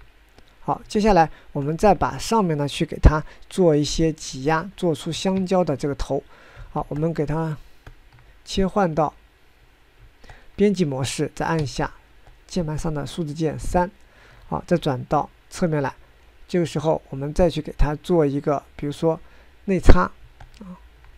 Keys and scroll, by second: 6.0 ctrl+Tab, 6.4 ctrl+Tab, 6.5 ctrl+Tab, 6.6 ctrl+Tab, 6.7 ctrl+Tab, 12.2 3, 15.4 1.